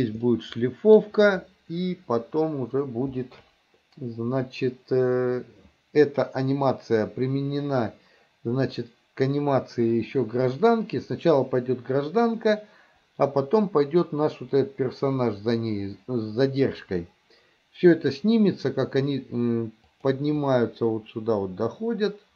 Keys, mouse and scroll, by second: 0.3-1.0 middle drag, 20.0 click, 20.5-22.3 drag.